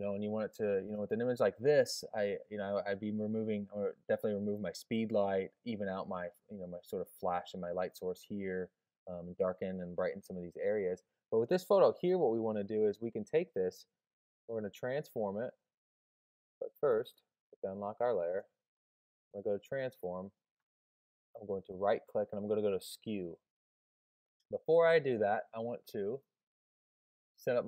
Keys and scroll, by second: 14.0 super+t, 19.6 super+t.